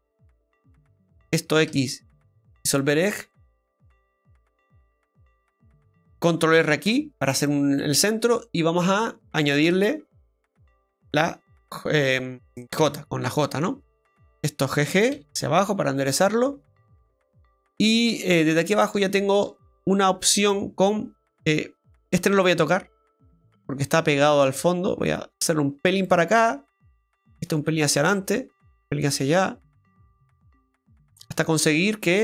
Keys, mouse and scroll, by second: 0.4 click, 1.0 right click, 1.7 x, 3.3 middle click, 4.0 middle click, 6.9 ctrl+r, 7.8 middle click, 9.3 click, 10.3 right click, 10.7 shift+right click, 12.8 j, 13.4 middle click, 14.2 right click, 15.1 g, 17.4 middle click, 18.6 right click, 19.3 shift+right click, 19.6 middle click, 20.4 click, 21.9 right click, 24.4 click, 26.6 right click, 27.7 click, 29.0 click, 30.4 right click, 30.8 middle click, 31.5-32.0 scroll down 1, 32.0 scroll down 1.